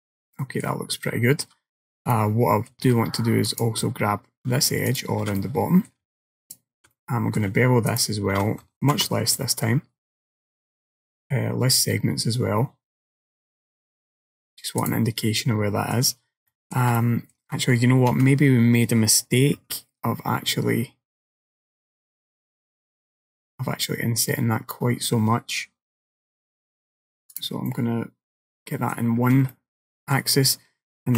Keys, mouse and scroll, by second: 1.1 shift+middle click, 1.7-2.2 scroll up 2, 2.2 shift+middle click, 3.5 alt+click, 4.9 alt+shift+click, 5.5 middle click, 6.5 alt+shift+click, 7.0 middle click, 7.9 alt+shift+click, 9.0 ctrl+b, 15.3 middle click, 16.6 shift+middle click, 17.0 middle click, 18.2 a, 19.6 s, 27.8 middle click, 29.3 scroll down 2, 29.6 middle click.